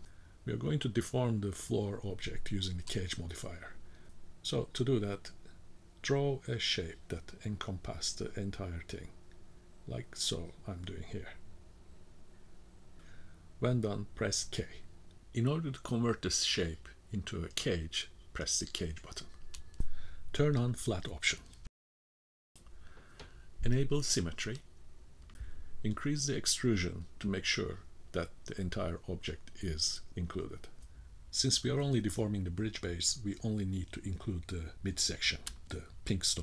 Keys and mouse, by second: 1.4-7.3 drag, 10.0-14.9 drag, 16.1 k, 25.3 middle click, 25.7 click, 26.6 shift+middle click, 27.0 middle click, 28.3-31.6 drag, 32.0-34.1 middle drag, 34.9-36.4 drag.